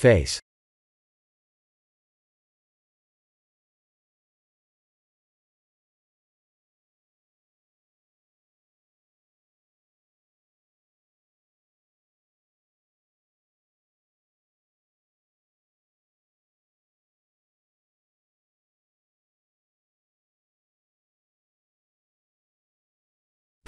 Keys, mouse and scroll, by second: 1.1 s, 3.4 s, 5.7-6.4 scroll up 4, 6.6 Tab, 7.1 3, 7.4 2, 8.3 alt+click, 9.5 e, 10.4 s, 12.7 e, 14.0 e, 15.0 e, 16.3 e, 17.2 e, 18.4 e, 19.8 s, 22.7 middle click, 22.8 middle click.